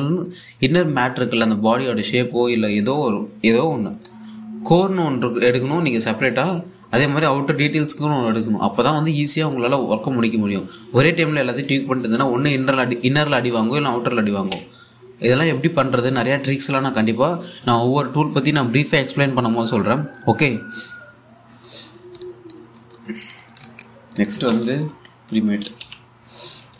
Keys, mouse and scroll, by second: 22.8 alt+Num_Lock, 23.6 scroll up 1, 23.8 click, 24.1 scroll down 1, 24.3 alt+click, 25.0 Tab, 25.3-26.7 typing.